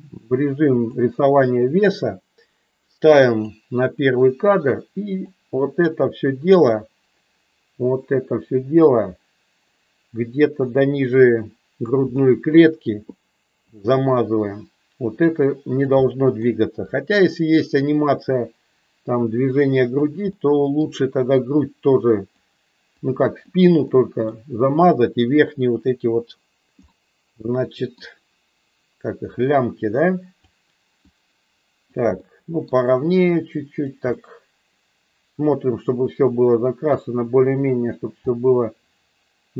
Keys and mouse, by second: 3.5 click, 5.2-11.9 drag, 12.1 middle click, 13.7-15.7 drag, 15.9 middle click, 16.9-20.0 drag, 20.2 middle click, 21.5 click, 23.0 click, 23.7 middle click, 26.9-28.0 middle drag, 29.2-30.3 drag, 31.1 click, 32.2 middle click, 33.3 click, 34.1-36.9 middle drag, 38.2-39.5 middle drag.